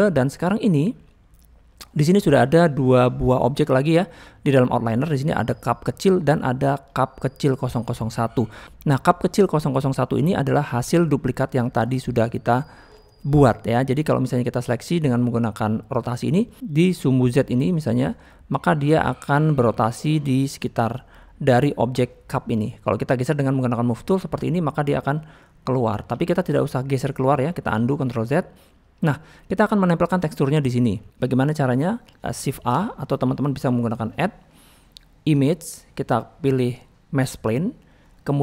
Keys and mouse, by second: 0.4 drag, 0.6 click, 3.2 click, 5.6 click, 6.9 click, 10.9 click, 12.1-12.5 middle drag, 12.9 middle click, 13.5-14.3 middle drag, 16.8 middle click, 17.4-20.6 drag, 20.9 middle click, 22.5 click, 22.8 middle click, 24.4-24.8 drag, 25.2-26.0 middle drag, 28.0 ctrl+z, 28.3 middle click, 30.6 middle drag, 31.2 middle click, 33.2 shift+a, 34.2-37.6 drag.